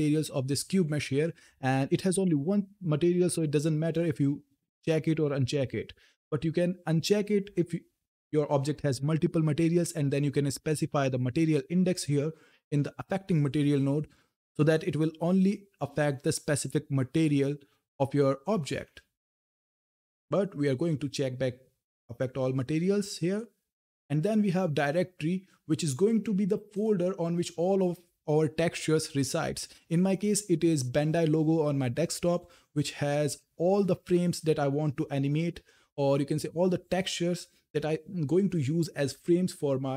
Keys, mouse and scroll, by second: 7.3 click, 10.4 click, 20.1 click, 23.1-25.9 drag, 26.5 click, 31.9 click, 33.8 scroll down 1, 36.2 scroll up 1.